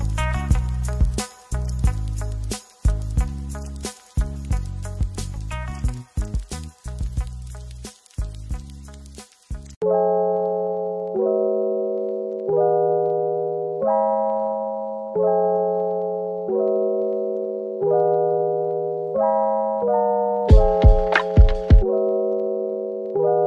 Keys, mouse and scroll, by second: 0.0 double click, 0.3 middle click, 3.6 shift+right click, 3.7 a, 7.8 typing, 10.7 typing, 13.0-16.4 typing, 18.3 typing, 20.0 typing, 21.3 scroll down 1, 21.5 middle click, 22.6 typing.